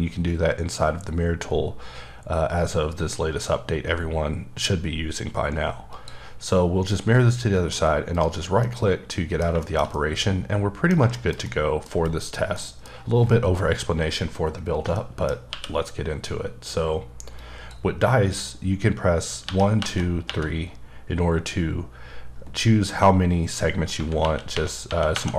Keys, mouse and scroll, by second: 5.9 click, 8.1 right click, 8.6 middle click, 9.4 scroll down 2, 9.6 shift+middle click, 12.5 middle click, 14.9 middle click, 15.5 q, 17.3 click, 19.4-20.2 typing, 22.5 typing, 23.9-25.3 typing.